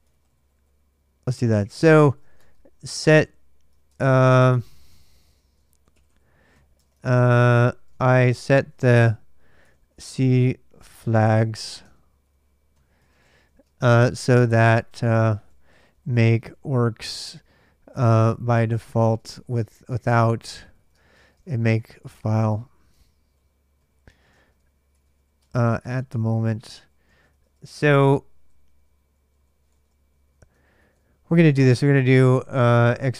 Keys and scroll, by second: 0.0-2.6 typing, 3.7 ctrl+[, 3.8 ctrl+j, 3.9-31.0 typing, 32.0-33.1 typing.